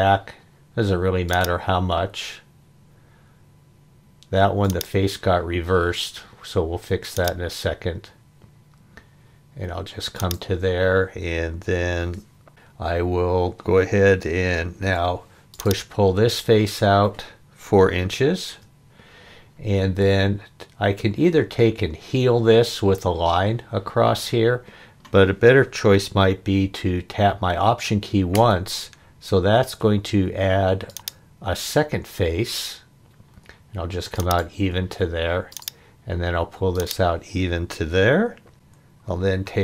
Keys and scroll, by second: 14.8 p, 17.9 4, 18.5 Return, 39.3 e.